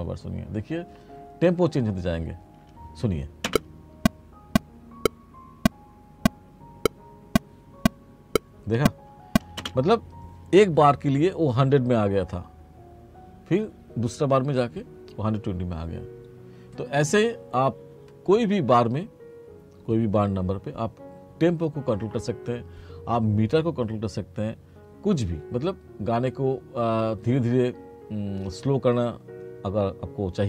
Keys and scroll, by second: 3.6 space, 9.7 space.